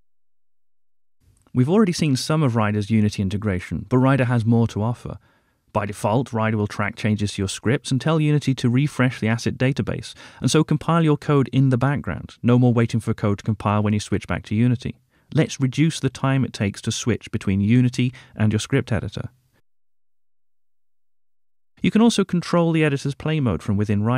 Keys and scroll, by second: 1.1 Return, 5.1 Return, 5.4 super+d, 7.4 ctrl+alt+shift+Right, 9.1 Return, 14.2 super+s.